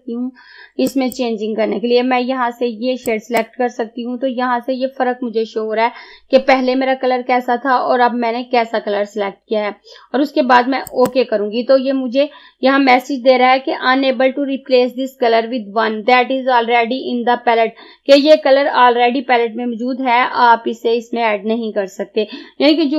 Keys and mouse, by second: 0.9 click, 10.9 click.